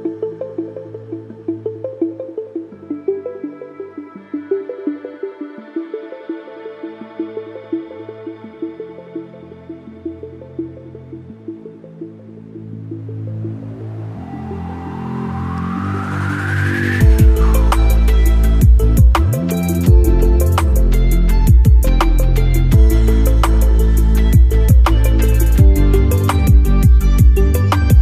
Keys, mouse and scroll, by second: 5.9 click, 6.9 alt+middle click, 8.1-15.4 drag, 15.5 alt+scroll up 1, 16.6-27.6 drag, 27.6 alt+middle click.